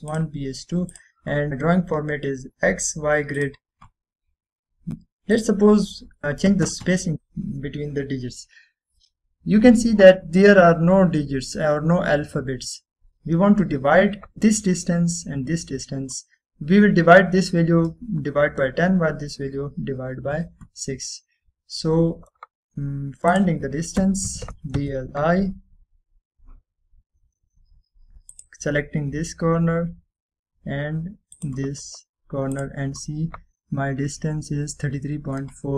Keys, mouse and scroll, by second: 1.2 click, 5.2 click, 7.0 middle click, 7.8 click, 13.1 typing, 13.7 Return, 24.4 click, 24.9-26.0 typing, 29.4 click, 32.4 click, 34.9 scroll up 1.